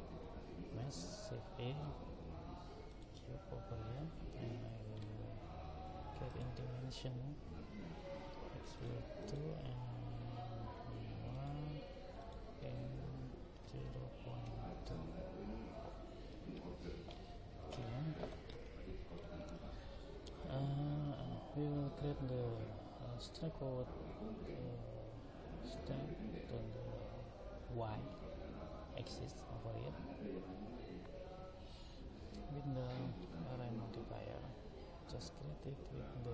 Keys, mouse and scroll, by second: 6.3 click, 9.2 click, 12.2 click, 16.5-22.9 middle drag.